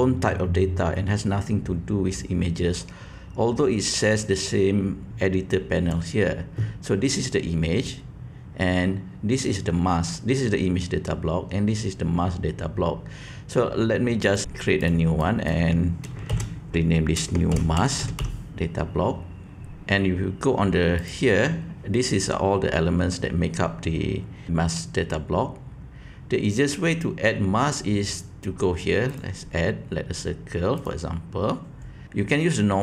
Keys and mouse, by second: 5.1-6.0 drag, 14.2 click, 14.9-16.1 drag, 16.1 shift+middle click, 16.4 click, 17.1 shift+middle click, 17.6-19.8 drag, 29.0-30.9 drag, 32.0 g.